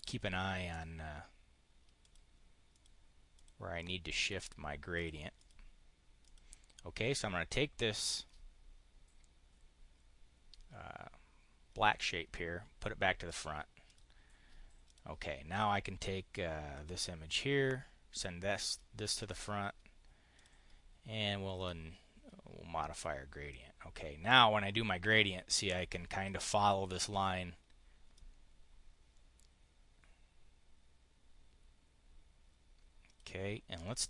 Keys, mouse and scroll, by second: 1.8 click, 2.6 click, 3.2 click, 3.7 click, 4.8 click, 5.2 click, 6.1 click, 13.1 click, 13.6 click, 14.7 click, 16.6 click, 18.5 click, 19.0 click, 20.2 click, 21.4 click, 23.4-26.2 drag, 28.0-33.1 drag.